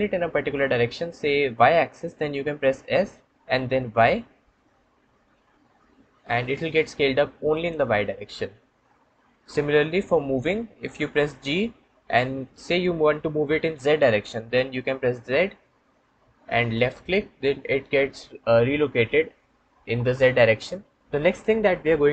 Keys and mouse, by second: 2.7 s, 3.8 y, 11.3 g, 15.3 z.